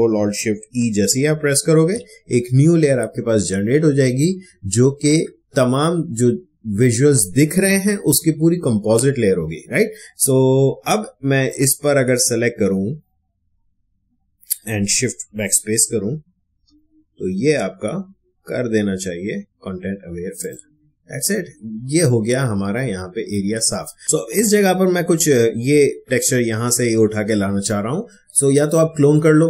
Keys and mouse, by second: 1.3 ctrl+alt+shift+e, 11.4-15.7 drag, 15.7 shift+BackSpace, 16.5 Return, 20.4 click, 24.0 click.